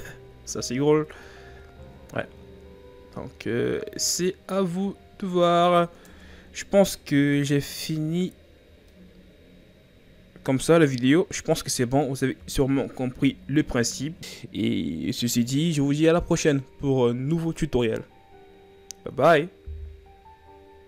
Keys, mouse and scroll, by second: 0.3-1.0 scroll up 2, 1.0 Tab, 1.4 s, 6.1 Tab, 6.5-6.9 scroll up 2, 7.0-8.4 scroll down 1, 8.4-8.9 scroll down 5, 8.9-12.0 middle drag, 13.1 KP_1.